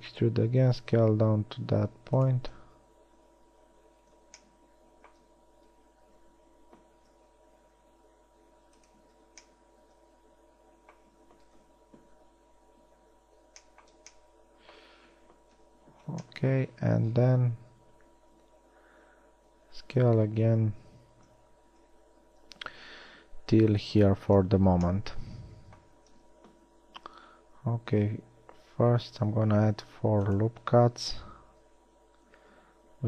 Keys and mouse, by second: 0.2 e, 0.8 s, 7.4 s, 12.0 KP_1, 13.6 z, 15.4 z, 16.0 KP_1, 20.2 e, 25.1 a, 28.0 ctrl+r, 32.0 s.